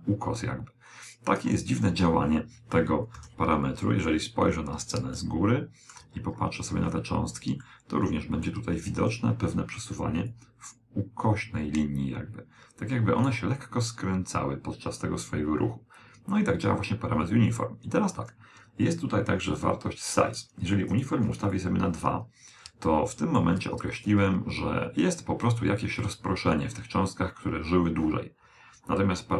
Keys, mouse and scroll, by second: 1.0 KP_7, 2.6-7.4 middle drag, 8.2 click, 13.9 click, 18.8 click, 20.2-22.5 middle drag.